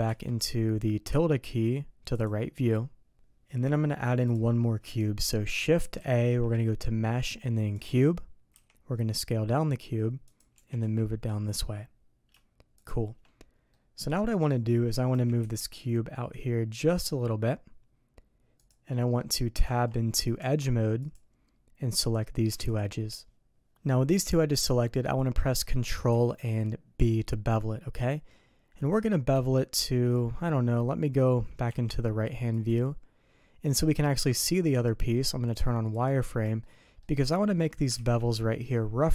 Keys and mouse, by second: 8.6 shift+s, 10.5 g, 13.7 middle click, 18.9 middle click, 19.6 Tab, 20.4 Tab, 22.1 click, 22.7 shift+click, 24.3 middle click, 25.4 middle click, 26.1 ctrl+b, 29.8 middle click, 35.9 click, 36.6 shift+click, 38.0 ctrl+b.